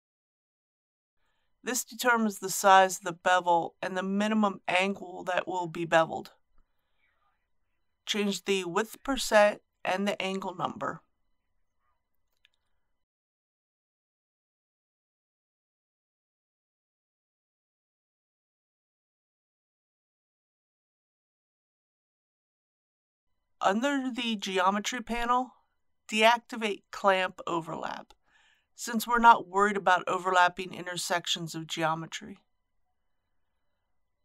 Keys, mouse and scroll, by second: 13.8 KP_1, 14.0 KP_0, 16.3 click, 16.9 KP_2, 17.1 KP_0, 24.7-34.2 drag.